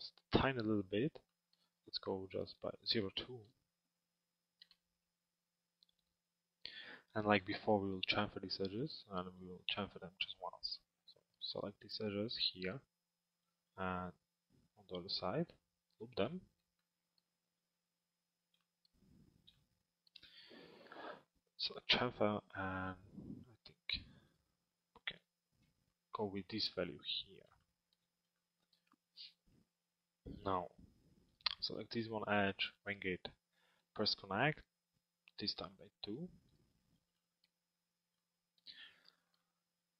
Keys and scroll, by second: 4.3 Return.